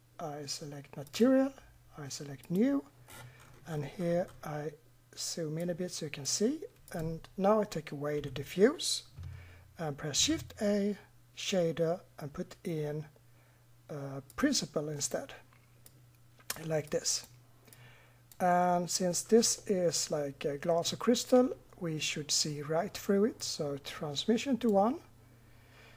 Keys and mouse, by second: 1.1-5.0 drag, 5.0 middle click, 5.6 click, 6.9 right click, 8.2 Delete, 10.2 shift+a, 15.9-19.5 drag, 23.4-25.3 middle drag.